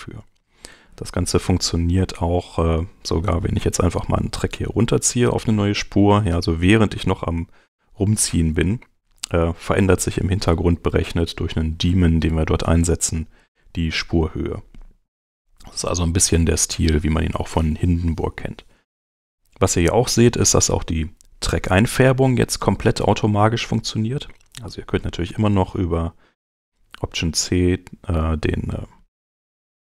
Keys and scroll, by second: 26.6 alt+v, 29.5 9.